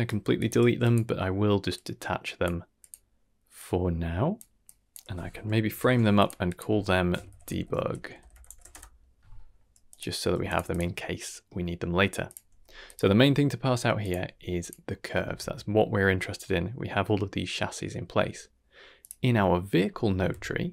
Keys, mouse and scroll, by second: 0.3 drag, 0.5 g, 1.6-2.8 drag, 3.5-4.3 drag, 4.6-5.0 drag, 5.6 ctrl+j, 6.1 click, 6.4 click, 6.6 F2, 8.2 shift+BackSpace, 9.8 click, 10.1 g, 10.6 click, 11.0 middle click, 12.2 click, 12.4 g, 13.9 click, 14.2 g, 15.1 ctrl+s, 16.1-16.4 middle drag, 18.9 click, 20.1 a, 20.2 KP_Decimal.